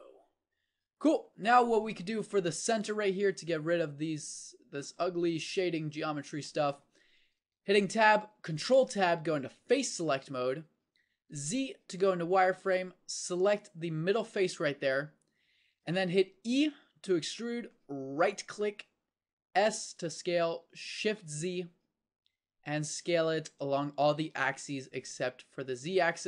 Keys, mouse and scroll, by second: 1.9 Tab, 5.9-7.3 middle drag, 7.3 Tab, 8.5 ctrl+Tab, 11.4 z, 16.6 e, 19.6 s.